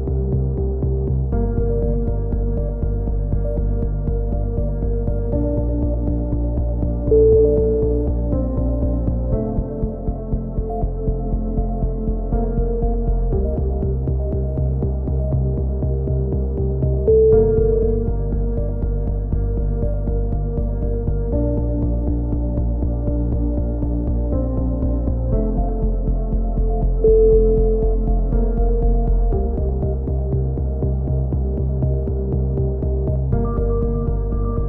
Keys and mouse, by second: 0.2-4.9 drag, 5.4-7.0 drag, 7.2 b, 7.8 click, 8.9-10.3 drag, 9.0 b, 10.3 z, 10.5 a, 10.6 click, 11.9 click, 16.1 click, 16.1-17.2 right drag, 17.2 f, 17.3 a, 17.5 click, 18.6 z, 18.7 click, 19.3 c, 22.7 right click, 23.0 click, 23.4 ctrl+KP_3, 23.6 z, 23.7 click, 25.4-26.8 drag, 27.6 a, 27.8 right click, 28.6 ctrl+KP_3, 29.2-31.1 drag, 31.4 click, 31.8-33.0 right drag, 32.4 click, 33.3 KP_3, 33.8 a, 34.1 click, 34.4 KP_3.